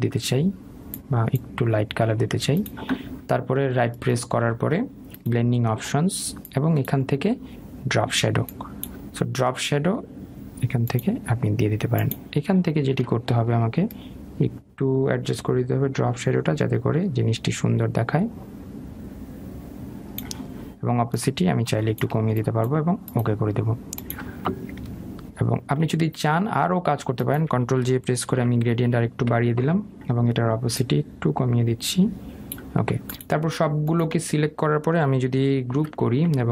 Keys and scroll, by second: 29.2 ctrl+j.